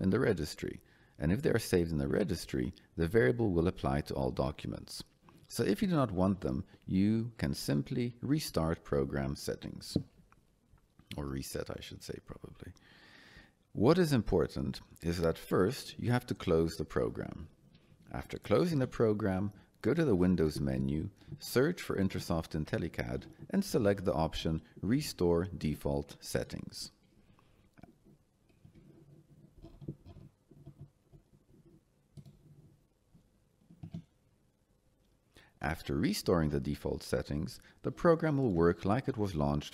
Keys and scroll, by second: 28.4 Escape.